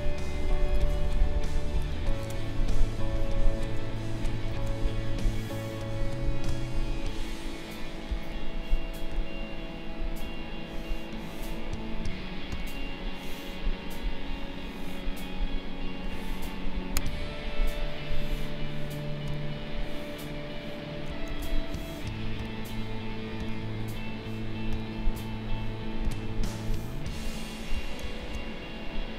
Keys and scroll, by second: 1.4 ctrl+-, 4.4 ctrl+a, 16.2 ctrl+z, 21.2 ctrl+a, 28.2 ctrl+shift+a.